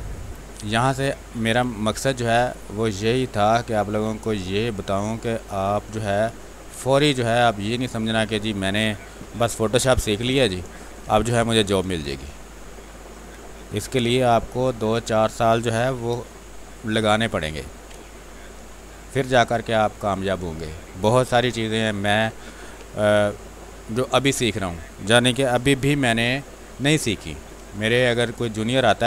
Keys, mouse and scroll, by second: 4.0 space, 4.4 alt+click, 8.0 ctrl+space, 8.3 ctrl+click, 8.6 ctrl+space, 9.7 click, 10.9 b, 11.3 ctrl+space, 11.5 ctrl+click, 13.3 space, 13.5 alt+click, 15.2 click, 15.9 ctrl+d, 17.4 ctrl+space, 17.6 ctrl+click, 18.3 w, 18.8 click, 19.8 space, 20.3 ctrl+click, 21.2 r, 21.4 click, 22.6 b, 24.6 click, 28.0 space, 28.2 click, 28.6 space, 28.9 click.